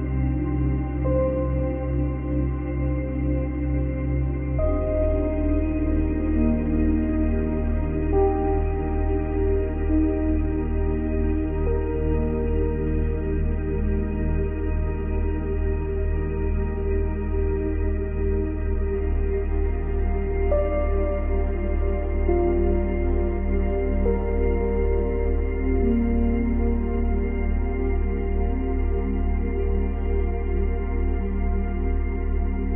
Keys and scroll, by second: 2.3 space, 4.9 space, 9.8 space, 10.9 space, 15.2 space, 16.1 space, 23.1 space, 26.0 space, 27.9 space.